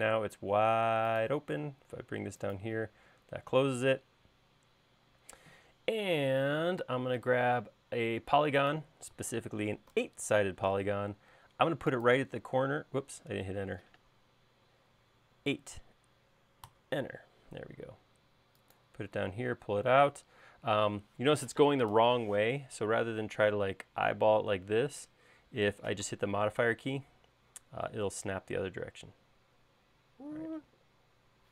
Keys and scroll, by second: 0.1 l, 10.0 8, 13.8 Escape, 15.4 8, 16.7 Return.